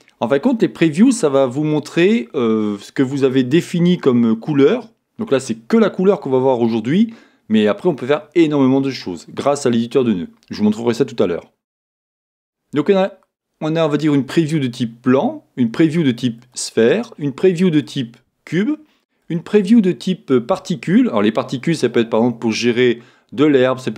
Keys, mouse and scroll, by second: 12.3 click, 16.4 click, 17.9 click, 19.6 click.